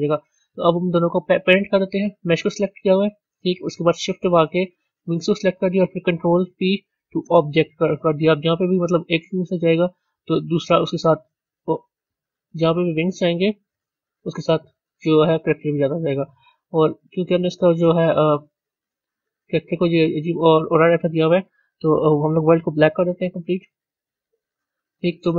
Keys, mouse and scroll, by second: 0.0 click, 0.6-4.9 middle drag, 4.9 shift+click, 7.4 ctrl+p, 8.3 a, 9.4 click, 10.5 g, 12.9 click, 13.6 g, 16.6 z, 17.3-17.8 middle drag, 17.8-18.5 scroll up 6, 18.5 middle click, 19.4 scroll down 1, 23.9 click.